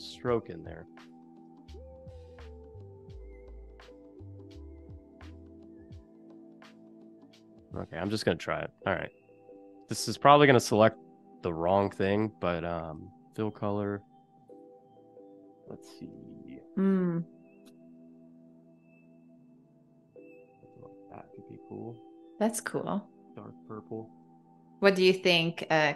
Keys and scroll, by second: 3.6 v, 5.2 a.